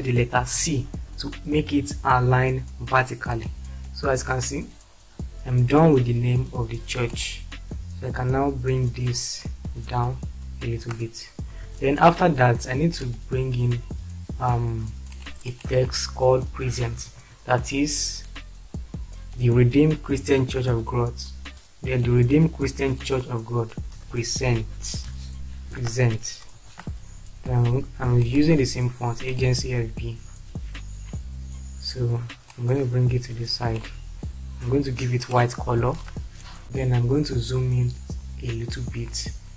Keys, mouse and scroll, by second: 1.0 c, 9.8 Down, 11.6 shift+F4, 16.9-17.7 typing, 24.0-25.8 typing, 26.6 ctrl+space.